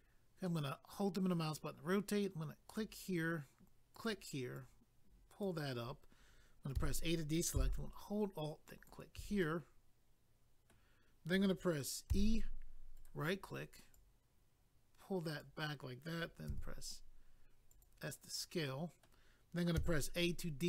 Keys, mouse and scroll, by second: 0.0 click, 0.5 middle click, 2.7 click, 2.8 click, 3.9 click, 4.1 click, 4.6 click, 6.8 a, 8.7 alt+click, 9.4 middle click, 10.3 middle click, 13.0 right click, 13.1 right click, 13.9 click, 16.5 s, 17.7 click, 17.8 click, 18.0 middle click, 19.7 a.